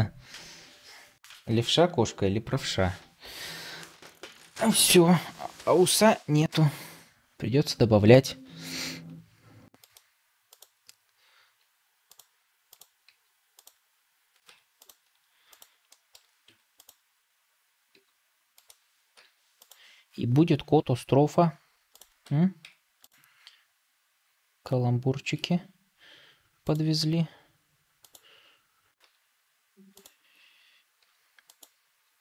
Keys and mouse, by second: 9.0 r, 11.4 g, 12.9 g, 14.4 Tab, 15.8 shift+middle drag, 16.4 Tab, 17.8 r, 19.0 ., 20.8 r, 22.2 Tab, 22.5 Tab, 25.2 r, 28.9 s, 30.9 r, 31.9 r.